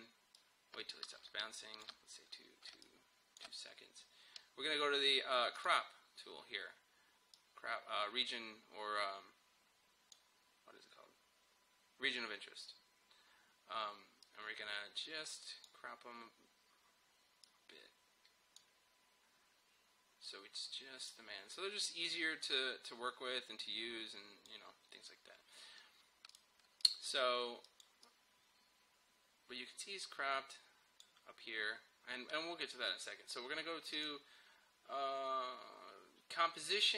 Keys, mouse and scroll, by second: 0.4-2.7 drag, 2.7 space, 2.9 click, 3.2 space, 5.6-12.5 drag, 14.3-33.5 drag, 34.0 click.